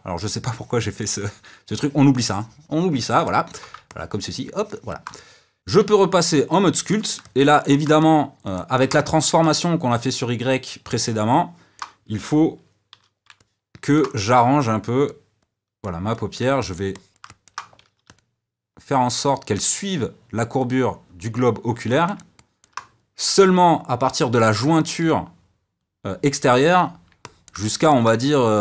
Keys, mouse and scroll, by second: 5.9-13.1 middle drag, 13.1 d, 13.3-14.4 middle drag, 14.4-16.5 drag, 16.5-17.7 middle drag, 17.7 f, 18.8-22.0 drag, 22.0-28.6 middle drag.